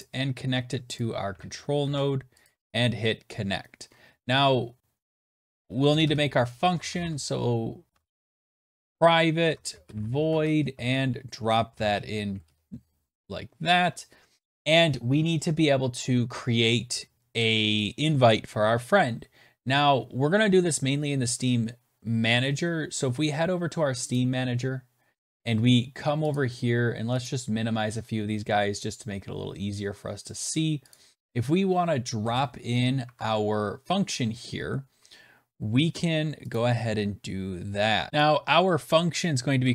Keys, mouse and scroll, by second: 0.9 click, 1.2 ctrl+a, 1.7 ctrl+c, 2.3 click, 3.8-4.1 scroll down 4, 5.1 click, 5.4-5.8 scroll, 5.8 Return, 5.9 Return, 6.2-12.7 typing, 7.9 middle click, 9.3 Tab, 19.1 ctrl+s, 24.0 click, 26.2 click, 27.1 click, 27.8-29.0 scroll, 30.8 click, 30.8-32.1 scroll, 32.1 Return, 32.9 Tab, 36.4 click, 37.5-37.9 scroll, 38.1 click, 39.3-39.7 typing.